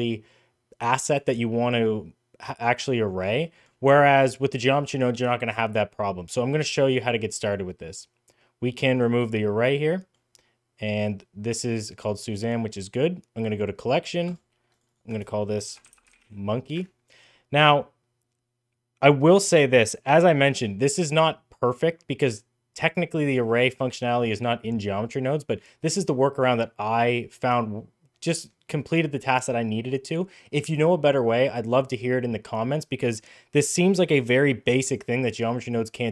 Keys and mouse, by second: 3.3 middle click, 8.8 click, 9.3 middle click, 9.8 middle click, 12.5-14.2 right drag, 14.7-17.2 drag.